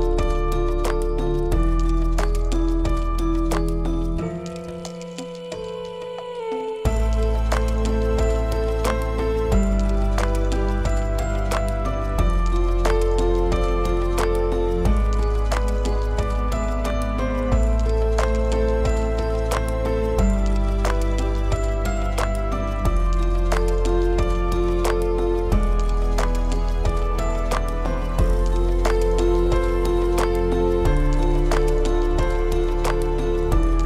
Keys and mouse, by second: 0.6 Tab, 1.8 click, 3.8-4.5 drag, 5.1-6.2 middle drag, 10.4-11.1 middle drag, 12.1 shift+middle click, 15.6 middle click, 16.8-17.9 middle drag, 23.0-24.3 middle drag, 25.3 middle click, 26.1-26.6 shift+middle drag, 30.8 click, 32.5 middle click, 33.2-33.5 shift+middle drag, 33.6 middle click.